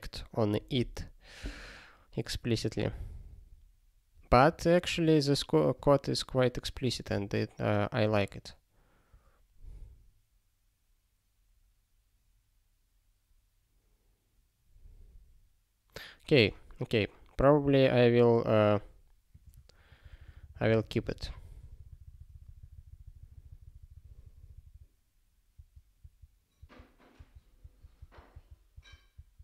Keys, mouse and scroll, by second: 19.3 click, 19.9 ctrl+/, 20.1-21.2 ctrl+/.